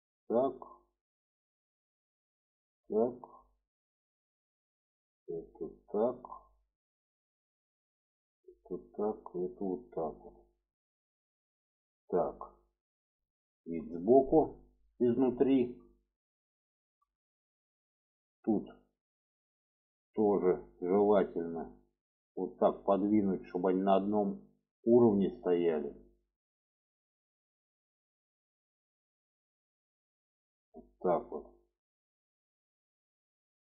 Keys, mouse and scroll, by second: 1.1 click, 1.7 click, 3.1 click, 3.9 click, 4.6 click, 5.0 click, 6.5 click, 7.1-8.1 drag, 8.7 click, 9.4 click, 10.3 click, 12.6 middle click, 13.7 shift+middle click, 14.6 shift+middle click, 15.2 shift+middle click, 16.4 shift+middle click, 17.9 shift+middle click, 19.2 click, 20.6-22.5 drag, 23.2 click, 23.7-25.0 drag, 25.6 click, 26.8-28.3 drag, 28.7 click, 29.3-30.5 drag, 31.2 click, 32.0-33.2 drag.